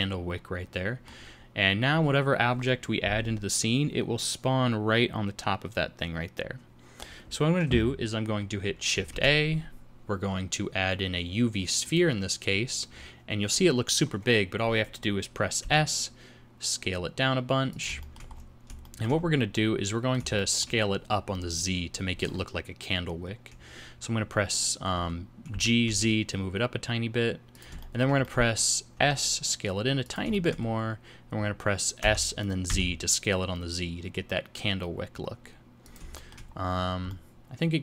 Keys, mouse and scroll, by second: 1.3 scroll down 2, 9.1 shift+a, 12.9 scroll down 5, 15.6 s, 18.0 shift+middle click, 18.3-19.3 scroll up 8, 18.8 shift+middle click, 19.5 middle click, 20.3 shift+middle click, 25.5 g, 27.8 shift+middle click, 28.2 middle click, 28.9 s, 30.3 shift+middle click, 30.6 scroll up 3, 31.3 scroll down 3, 32.0 s, 36.1 shift+middle click, 36.7 scroll down 4, 37.1 middle click.